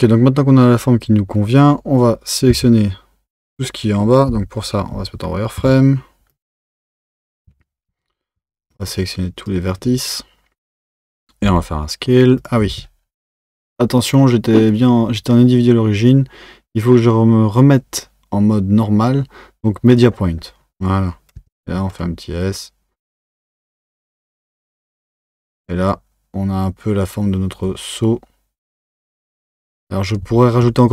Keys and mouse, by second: 2.5 Tab, 4.3 z, 6.3 click, 7.5 1, 7.9 Tab, 8.4 1, 8.9 click, 11.4 s, 12.7 z, 14.0-17.1 drag, 24.5 Tab.